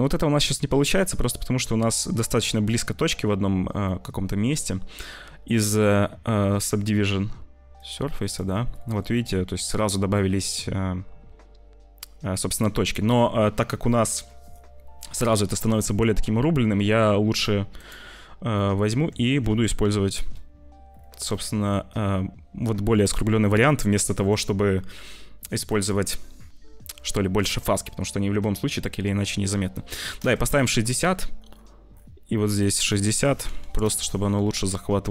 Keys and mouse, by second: 3.8 click, 7.7 click, 8.7 click, 15.2 click, 17.7 click, 18.5 click, 18.9 Tab, 19.3 Tab, 25.7-30.2 drag, 32.4 click, 32.8-33.9 drag, 34.9 click.